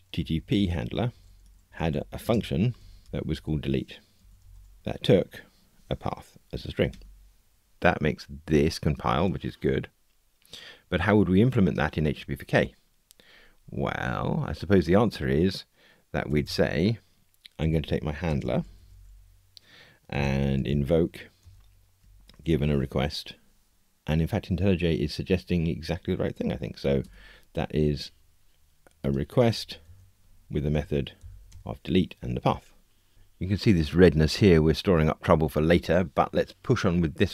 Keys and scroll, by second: 6.9 Tab, 21.4 Return, 27.0 Tab, 29.8 alt+Return, 31.4 alt+Return.